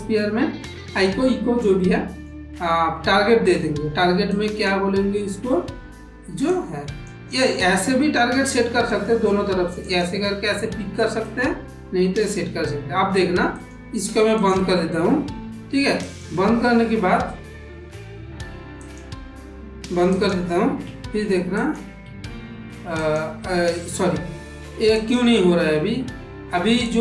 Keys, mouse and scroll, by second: 1.7 middle click, 4.2-7.0 drag, 8.8 click, 9.8 click, 13.5 click, 14.3 click, 15.9 click, 18.0 Tab, 18.8 click, 19.6 Tab, 20.0 click, 20.8 Tab, 21.5 click, 22.0 Tab, 22.9 click, 24.8 click.